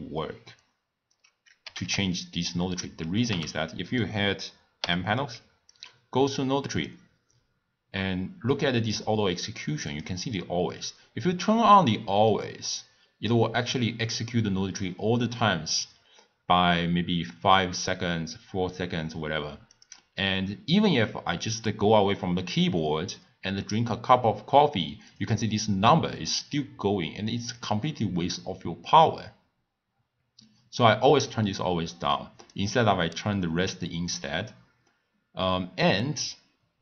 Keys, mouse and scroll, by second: 1.6 g, 3.2 b, 4.8 n, 5.7 click, 6.7-9.8 drag, 9.9 click, 19.7 click, 25.1 click, 27.5 click, 32.4 click.